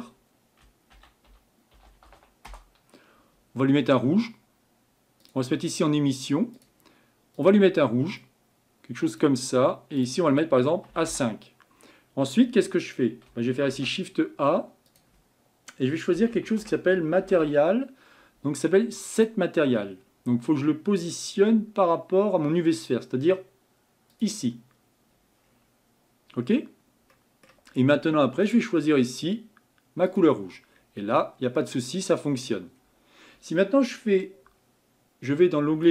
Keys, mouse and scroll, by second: 6.7-8.2 drag, 11.1-19.3 drag, 25.5-26.4 scroll up 5, 30.2-30.7 drag, 30.7-31.2 scroll down 5, 31.2-35.9 middle drag.